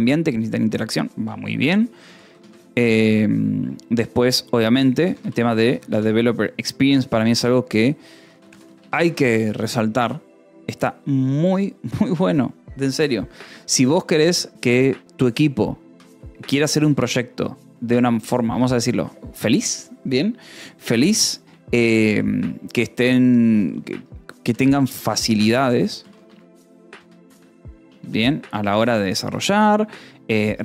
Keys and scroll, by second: 2.0-3.3 typing, 4.9 r, 5.1 space, 5.6 p, 5.9 r, 7.4 ctrl+e, 7.8-9.1 typing, 9.5 ctrl+s, 13.3 a, 13.7 space, 14.0 =, 14.1 space, 15.7 p, 16.4 r, 16.6 BackSpace, 18.2-19.1 typing, 24.9-29.2 typing, 29.8 ctrl+s.